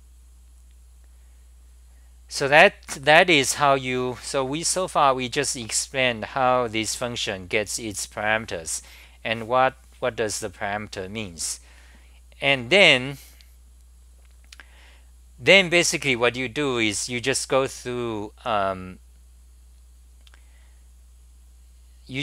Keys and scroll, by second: 6.2-7.1 scroll up 7, 11.6-12.3 scroll up 6.